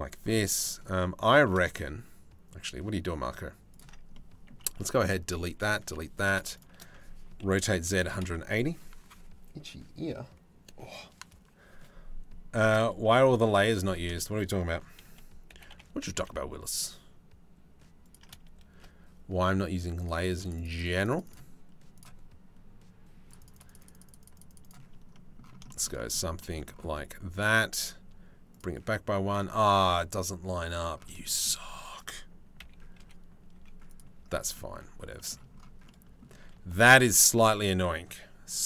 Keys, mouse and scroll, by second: 1.1 shift+d, 3.8 click, 4.7 click, 5.1 Delete, 5.2 click, 5.5 Delete, 5.9 click, 7.0 r, 12.2 middle click, 12.6 click, 13.1 shift+middle click, 13.7 shift+middle click, 14.6 f, 15.1 g, 16.0-17.8 ctrl+middle drag, 19.6 click, 19.8 click, 23.0 click, 24.8 middle click, 25.3 shift+middle click, 25.6 click, 25.8 shift+middle click, 26.6 click, 28.2 click, 30.8 shift+middle click, 30.9 shift+right click, 31.0 shift+middle click, 32.2 KP_3, 32.6 KP_1, 33.2 z, 34.3 shift+middle click, 34.9 shift+middle click, 36.0 z.